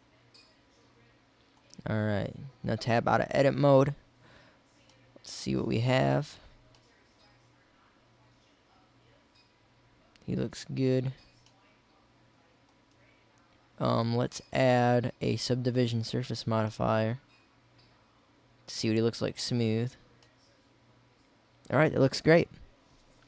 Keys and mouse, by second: 0.9-2.0 middle drag, 2.5 Tab, 9.2-11.0 middle drag, 13.9-16.1 drag, 16.1 middle click, 18.3 middle click.